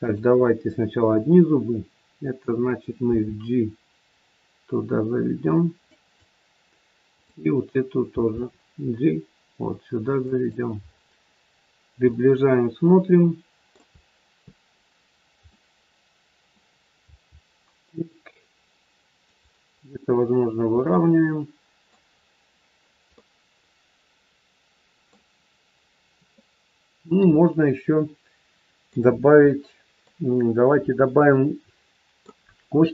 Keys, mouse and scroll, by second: 0.0 click, 3.1 g, 7.1 click, 8.1 g, 10.7 scroll up 4, 11.4-12.1 scroll up 2, 12.1 middle click, 13.9 scroll down 2, 15.4 middle click, 17.1 g, 19.7 scroll down 1, 20.3-20.8 scroll down 1, 20.8 middle click, 22.1 scroll down 1, 23.1 middle click, 26.3 middle click, 29.1 scroll up 1, 29.5 middle click, 31.1 middle click.